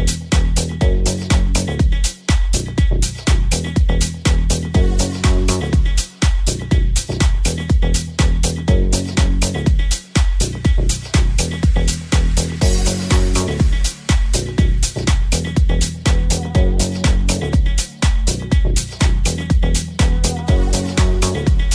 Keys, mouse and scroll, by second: 11.8 shift+a, 13.7 s.